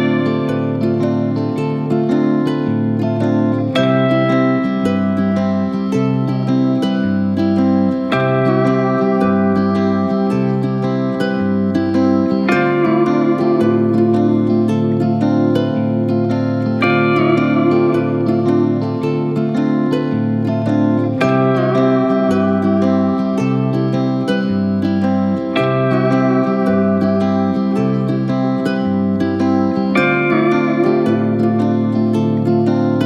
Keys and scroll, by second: 0.6 Return, 1.3 Return, 2.0 Return, 2.6 Return, 16.4 Return, 17.4 Return, 17.9 Return, 18.7 Return, 19.5 Return, 30.0 ctrl+s.